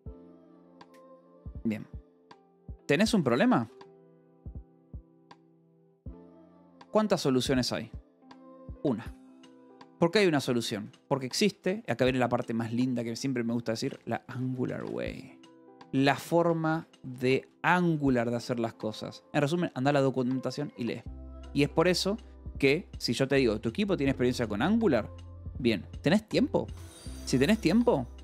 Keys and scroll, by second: 2.8-8.6 typing, 9.0 Escape, 10.8 a, 10.9 space, 11.3 ;, 11.7 space, 13.3-17.9 typing, 16.6 Escape, 18.0 Escape, 21.4 k, 22.1 j, 23.7 shift+v, 25.2 Escape, 27.4-28.2 typing.